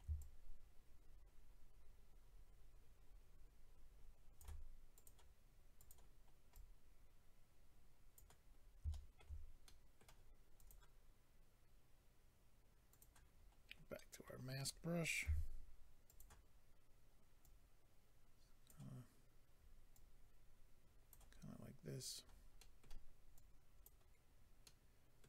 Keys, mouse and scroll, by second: 0.2 shift+click, 4.9 click, 5.8 click, 6.1 scroll up 1, 6.5 click, 8.5-8.9 scroll down 2, 8.9 shift+middle click, 9.6 middle click, 9.6 scroll up 1, 10.0-10.4 scroll down 2, 10.6 click, 10.7 click, 12.9 click, 13.0 click, 13.4-13.9 scroll up 1, 13.9 middle click, 13.9 scroll up 1, 15.2 f, 16.1 click, 16.2 click, 17.4 click, 19.9 click, 22.6 middle click, 23.3 click, 24.6 middle click.